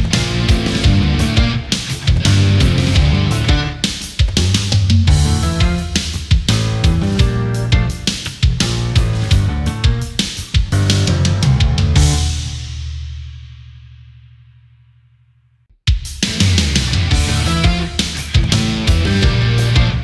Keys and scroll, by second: 1.0 space, 1.8 ctrl+-, 2.1 space, 3.7 ctrl+=.